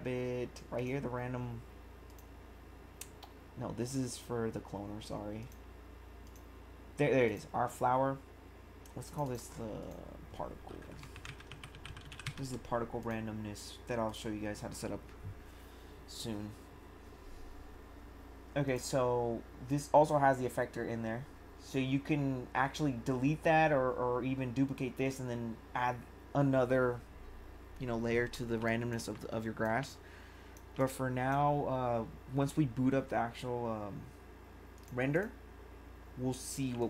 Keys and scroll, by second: 11.0-12.7 typing, 28.6 1.